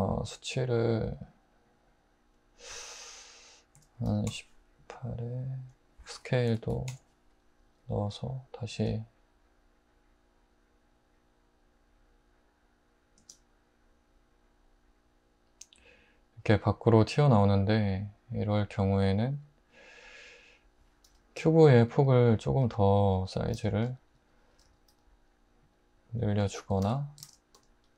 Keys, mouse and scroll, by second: 3.8-4.3 typing, 6.5-7.7 typing, 8.7 space, 13.2 space, 21.1 alt+h, 21.9 `, 22.6 `, 23.2 Tab, 23.5 alt+z, 24.6 typing, 26.4 Tab, 27.2 alt+z.